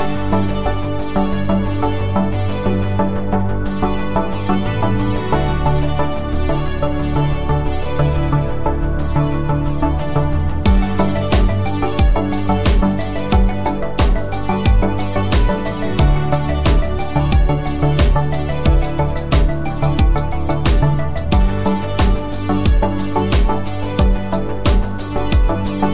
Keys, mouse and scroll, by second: 3.1 click, 6.7 ctrl+Num_Lock, 7.4 ctrl+click, 9.4 ctrl+click, 13.9 F9, 15.3 space, 23.7 space, 25.1 click.